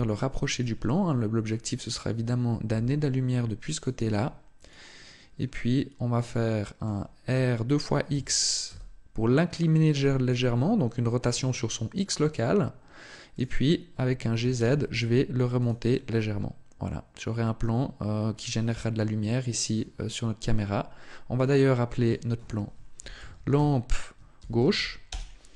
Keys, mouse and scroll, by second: 0.4 click, 2.6 g, 3.6 click, 3.9 r, 4.5 click, 5.3 middle click, 7.2 r, 13.2 click, 14.2 g, 15.7 click, 15.7 middle click, 21.8 click.